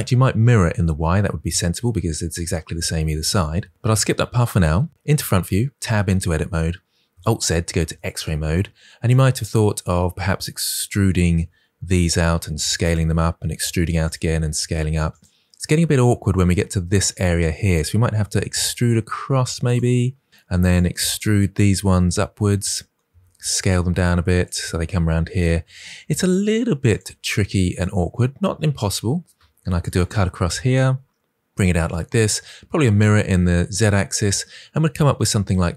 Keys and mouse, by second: 4.2 KP_1, 4.9 Tab, 5.6 Tab, 7.0 alt+z, 7.8 shift+middle click, 11.2 e, 12.1 s, 12.7 click, 13.3 e, 13.9 click, 14.0 s, 15.0 click, 18.2 e, 19.5 click, 21.9 e, 23.0 s, 23.5 click, 23.6 g, 24.3 click, 25.5 e, 26.1 click, 26.3 s, 26.8 click, 26.9 g, 27.6 click, 29.4 ctrl+r, 29.7 click, 29.8 click, 30.7 g.